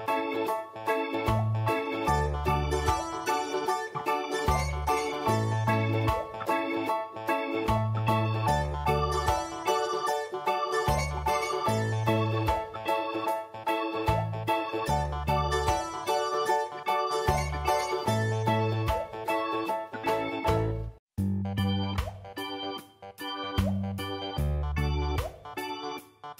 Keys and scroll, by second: 0.3 7, 1.0 ctrl+space, 5.2 ctrl+alt+v, 11.2 shift+v, 25.3-26.0 typing.